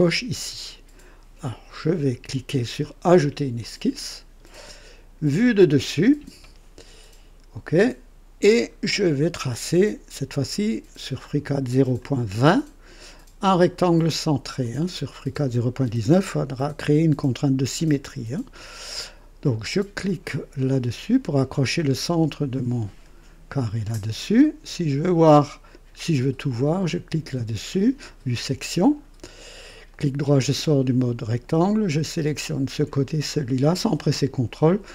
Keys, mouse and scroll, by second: 3.5 click, 5.3 click, 7.7 click, 8.7 scroll up 2, 9.4 right click, 11.9 click, 14.6 click, 20.9 click, 23.5 click, 28.0 click, 28.9 scroll up 2, 29.9 right click, 31.6 click, 32.8 click.